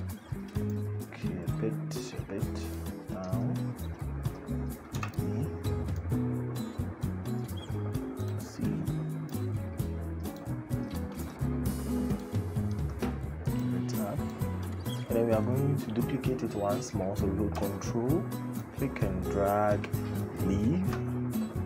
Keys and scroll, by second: 4.7 e.